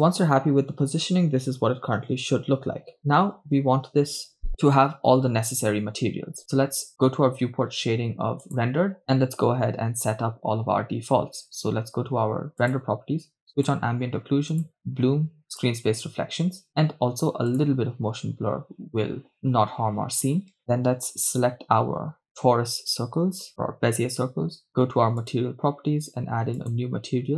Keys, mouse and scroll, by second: 3.2 shift+space, 8.8 click, 12.7-13.5 drag, 13.7-14.3 drag, 14.6-16.2 drag, 17.6 drag, 21.5-22.5 right drag, 25.3 click, 26.6-27.2 drag.